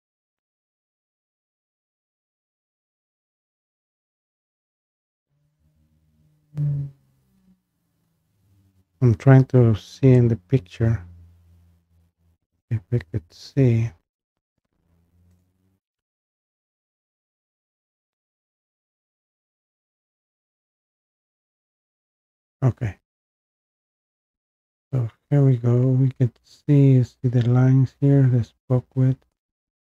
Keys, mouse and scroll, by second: 0.7 scroll, 1.4-2.7 scroll, 2.7-3.3 scroll, 3.3 scroll up 5, 10.2 click, 12.6 click, 17.9-18.5 scroll, 19.2 scroll, 20.4 click, 22.7-23.1 scroll, 23.3-23.7 scroll down 6, 25.2 scroll up 1, 25.9 scroll up 1, 26.0 scroll down 1, 27.0 scroll.